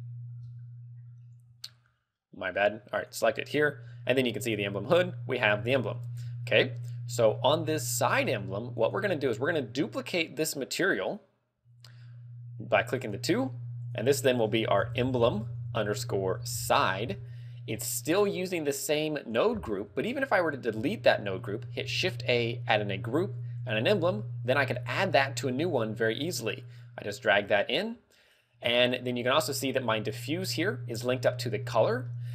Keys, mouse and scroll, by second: 0.5 scroll up 4, 1.3 scroll down 2, 1.8 middle click, 3.4 right click, 4.5 click, 5.8 shift+middle click, 6.6 middle click, 7.5 middle click, 9.2 right click, 13.1 click, 13.6 click, 13.9 click, 18.1 click, 21.0 x, 21.9 shift+a, 24.3 g, 24.6 click, 24.8 scroll up 4, 26.4 click, 28.3 click, 28.8 Tab, 29.4 scroll down 1, 32.1 middle click.